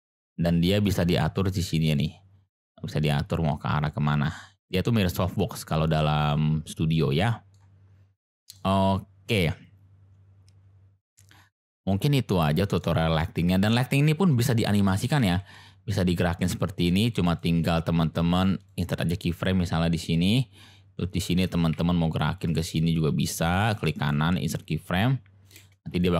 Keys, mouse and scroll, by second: 0.5-0.8 middle drag, 1.9-5.0 drag, 5.9-6.3 middle drag, 7.2-7.5 middle drag, 8.2-8.6 middle drag, 12.4-12.8 shift+middle drag, 15.2 g, 15.2 x, 17.2 click, 18.2 click, 20.1-21.1 drag, 21.6 g, 21.6 x, 22.4 click, 24.9 click, 25.6 space.